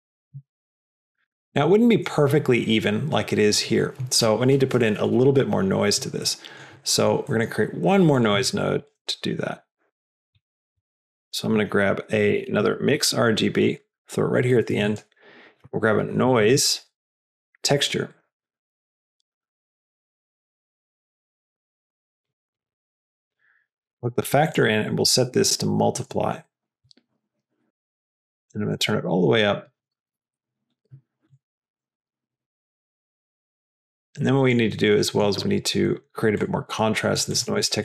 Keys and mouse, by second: 6.1 click, 6.8 click, 7.3 middle click, 8.0 click, 8.7 shift+click, 9.0 g, 10.4 middle click, 10.8 click, 10.9 shift+a, 14.6 click, 14.9 shift+a, 21.0-22.7 drag, 24.5-27.5 drag, 28.1-30.1 drag, 31.5-34.8 drag, 34.9-35.3 middle drag, 35.9 middle drag, 36.3 click, 37.2 click, 37.5 shift+a.